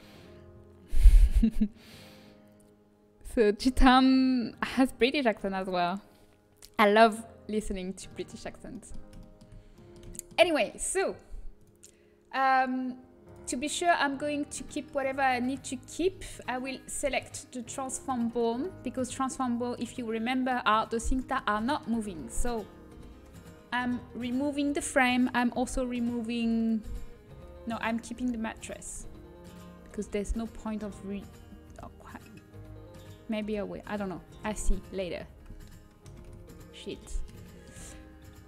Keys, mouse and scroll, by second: 7.7-10.0 middle drag, 11.5 middle click, 12.3-17.1 drag, 13.6-14.7 middle drag, 15.0-17.1 middle drag, 17.3-21.1 middle drag, 21.6-26.1 middle drag, 26.6-27.6 drag, 27.6 shift+l, 28.1 shift+l, 28.5 shift+l, 30.2 shift+l, 30.6 shift+l, 30.9 shift+l, 31.3 shift+l, 33.9 shift+l, 34.4 shift+l, 34.8 shift+l, 36.9 ctrl+z.